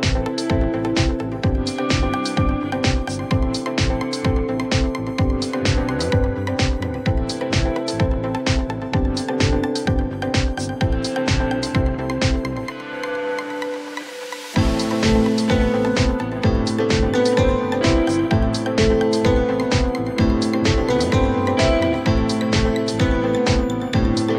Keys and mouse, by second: 0.7 alt+middle click, 6.9 click, 7.6 click, 8.4-9.1 drag, 9.6 alt+click, 10.8 drag, 14.1 click, 16.1 alt+click, 17.0 click, 17.7 alt+click, 18.2 click, 20.0 drag, 24.0 click.